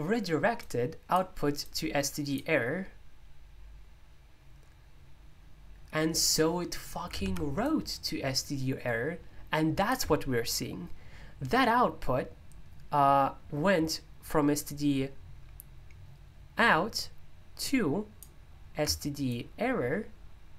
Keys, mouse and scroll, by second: 0.0-4.8 drag, 7.6-12.5 drag, 14.6-20.5 drag.